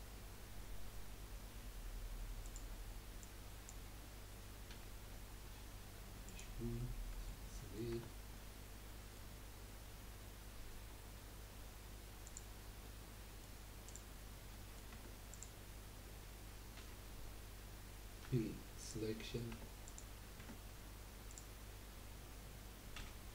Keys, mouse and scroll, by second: 3.2 click, 4.7 g, 6.8-8.1 middle drag, 8.1 Tab, 8.3-11.5 middle drag, 12.3 click, 12.8 middle drag, 13.8 click, 14.5 middle click, 14.9 Tab, 15.3 click, 16.8 l, 18.2 p, 19.2 middle click, 19.5 Tab, 19.8 click, 20.4 Tab, 21.3 click, 23.0 l.